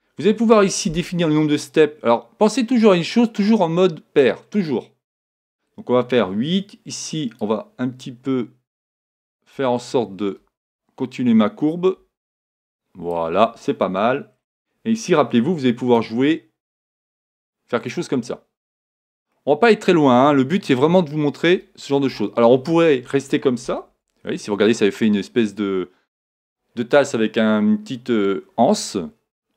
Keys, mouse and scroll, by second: 0.9-2.8 middle drag, 0.9-1.6 scroll up 1, 2.9 middle click, 7.4-9.4 drag, 14.3-16.8 middle drag, 14.3 scroll down 1, 15.0-15.5 scroll up 1, 15.5-15.9 scroll up 1, 15.9-17.8 drag, 19.3-21.1 middle drag, 21.5-22.1 scroll up 1, 22.1-23.0 scroll up 1, 22.1 KP_1, 23.0 scroll up 1, 23.9 Tab, 24.2-28.2 middle drag, 28.6-29.5 middle drag.